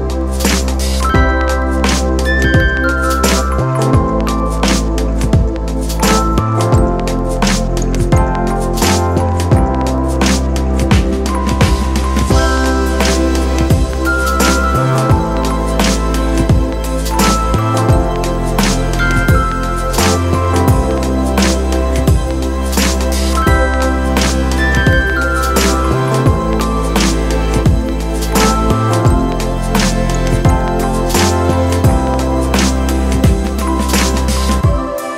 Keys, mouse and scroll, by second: 13.2 s, 22.9 ], 34.8 [.